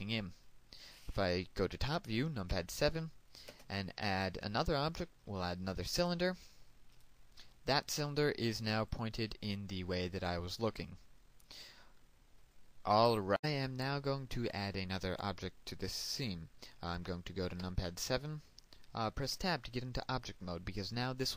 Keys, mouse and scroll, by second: 3.9 KP_7, 4.9 space, 7.3 click, 10.3-13.2 middle drag, 13.2 click, 19.2 KP_7, 21.0 Tab.